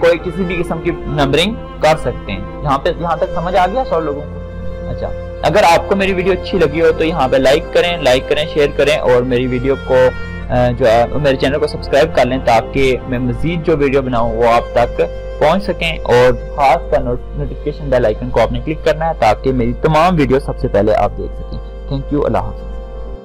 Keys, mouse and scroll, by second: 2.1 click, 10.8-15.9 drag.